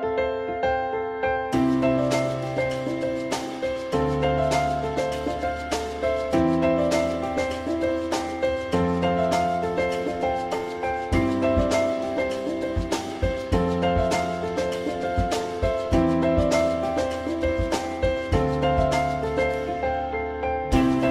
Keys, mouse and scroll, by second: 1.2 alt+middle click, 11.8 alt+middle click, 18.2 alt+middle click, 20.1 alt+middle click.